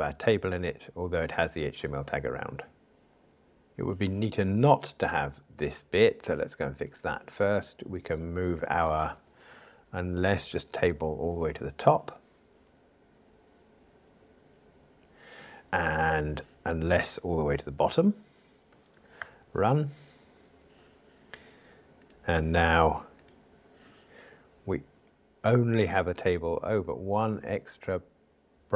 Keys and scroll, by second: 10.1 alt+shift+Up, 17.9 alt+shift+Down, 19.3 ctrl+r.